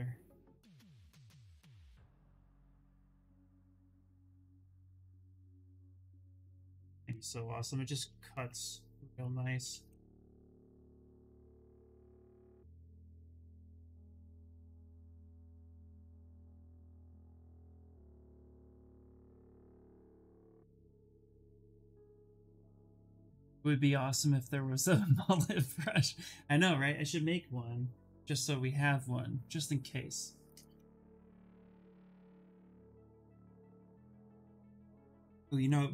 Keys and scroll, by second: 9.1 ctrl+z, 9.3 ctrl+z.